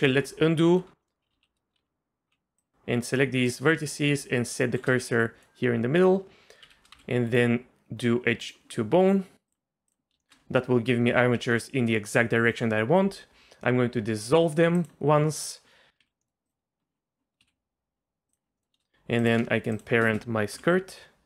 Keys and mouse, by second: 0.1 ctrl+z, 0.7 1, 1.0 click, 1.3 z, 1.8 z, 2.6 click, 4.1 shift+s, 5.1 middle click, 6.6 2, 6.9 a, 7.4-10.0 drag, 10.3 shift+drag, 14.8 click, 16.0 z, 16.2 middle click, 17.5 ctrl+z, 18.6-19.2 middle drag, 20.5 ctrl+p.